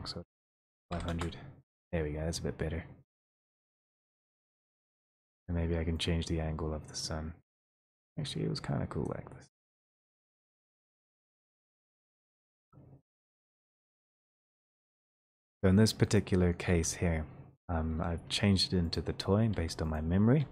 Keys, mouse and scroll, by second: 0.7 typing, 4.9 click, 5.6 e, 12.9 click, 16.3 click, 16.9 w, 19.0 click, 19.5 w, 20.1 click.